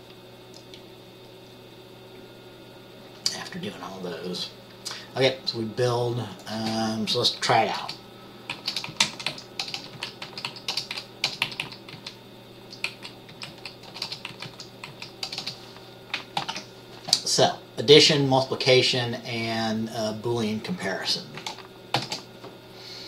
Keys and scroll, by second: 8.0-17.0 typing, 8.7 Right, 9.0 Down, 9.2 Right, 9.4 Right, 10.1 Down, 10.4 Right, 10.6 Right, 22.1 ctrl+b.